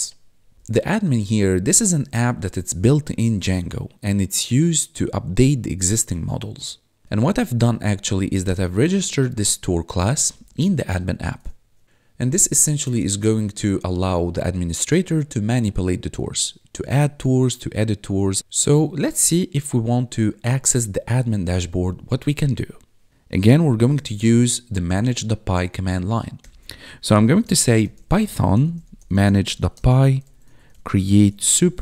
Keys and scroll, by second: 0.6 ctrl+Left, 1.1 ctrl+shift+Right, 7.0 Left, 7.5 ctrl+Right, 8.8 ctrl+shift+Left, 10.2 ctrl+Left, 10.9 ctrl+shift+Right, 23.5-24.3 typing, 26.3 ctrl+l, 26.8-31.8 typing.